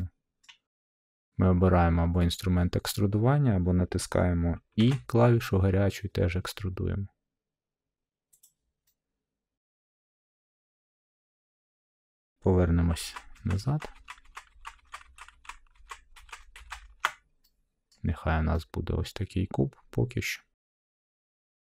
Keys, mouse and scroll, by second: 0.4 scroll, 1.4 middle drag, 4.7 e, 8.4-9.5 drag, 10.5 middle click, 10.7 middle click, 10.7 middle click, 11.4 middle click, 12.9 ctrl+z, 13.3 ctrl+z, 13.6 ctrl+z, 13.9 ctrl+z, 14.2 ctrl+z, 14.5 ctrl+z, 15.0 ctrl+z, 15.3 ctrl+z, 15.7 ctrl+z, 16.5 ctrl+z, 17.8 middle click, 18.1 middle click, 18.2 middle click, 19.0 scroll, 20.2-21.2 scroll, 21.3 middle click.